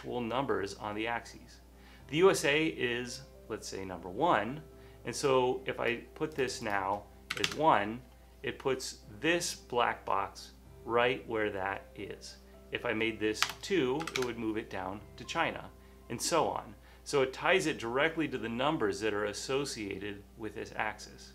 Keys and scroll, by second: 7.5 1, 7.5 Return, 10.6 typing, 13.6-14.1 typing, 14.3 Tab, 17.1 typing.